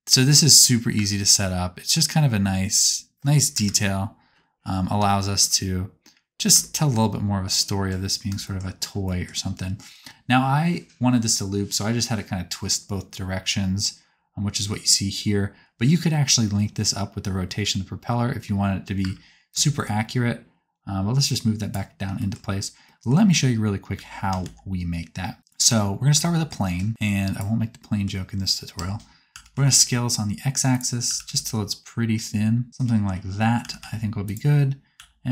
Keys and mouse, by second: 1.0 space, 1.4 click, 1.8 click, 3.6 KP_0, 5.0 shift+middle click, 5.2 shift+click, 5.4 shift+click, 7.4-8.8 middle drag, 8.8 shift+click, 9.1 shift+middle click, 9.2 shift+click, 9.4 right click, 10.7 right click, 11.6 right click, 19.2 space, 20.9-23.3 shift+middle drag, 23.9 shift+c, 24.4 shift+a, 25.4 click, 28.2-30.7 drag, 28.8 Tab, 29.4 s, 30.9 click, 31.1 s, 33.4-35.3 drag, 33.6 s, 34.9 s.